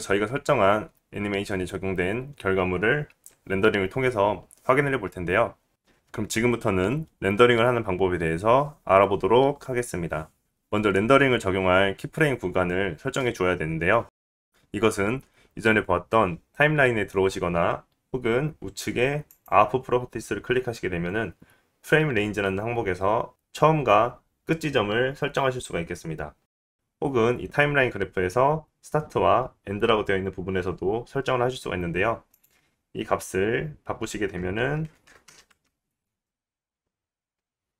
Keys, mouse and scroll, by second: 21.5-34.4 middle drag, 34.4-37.7 drag.